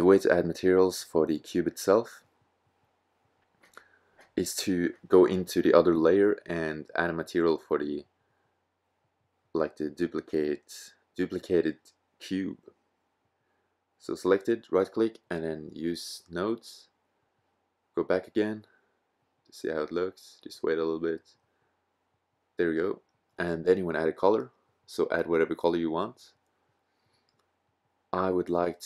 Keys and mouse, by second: 0.9 click, 1.7 click, 12.5-13.7 middle drag, 13.7-16.1 drag, 19.6-21.6 middle drag.